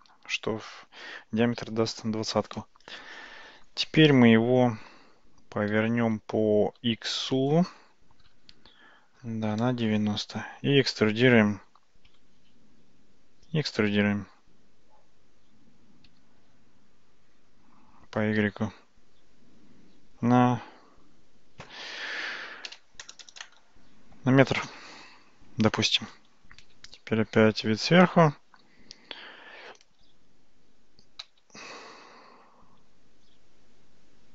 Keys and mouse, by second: 5.8 r, 13.4 e, 14.9 Tab, 16.1 e, 24.7 Tab, 26.8 `, 31.2 g.